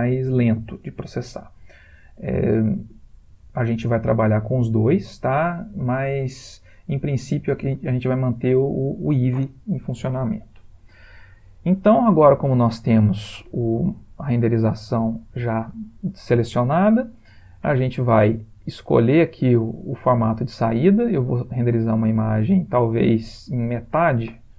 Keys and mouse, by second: 19.3 click, 23.9 ctrl+click.